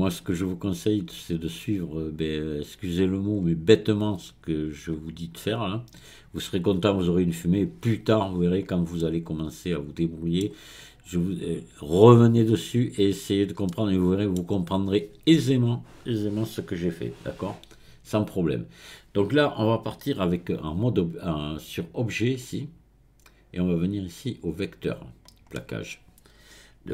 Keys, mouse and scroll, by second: 0.3-0.8 scroll up 1, 0.8-1.7 scroll down 1, 1.7-3.4 scroll down 1, 3.4-6.4 scroll up 1, 9.0-12.0 middle drag, 13.7-22.4 middle drag, 22.4 click, 25.5-26.9 middle drag.